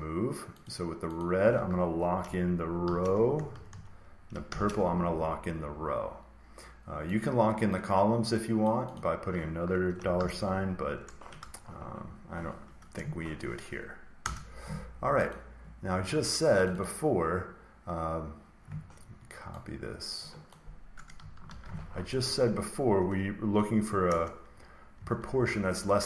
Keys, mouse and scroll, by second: 0.5 click, 1.1 click, 2.7 typing, 3.2 Right, 3.4 Right, 3.6 Right, 4.4 typing, 7.1 click, 8.5 click, 8.8 click, 10.1 typing, 11.3 BackSpace, 14.1 Return, 15.2 click, 16.6 click, 16.7 click, 20.4 click, 21.4 ctrl+c, 22.2-23.3 drag, 24.0 Return, 24.8 Right, 25.1 Return.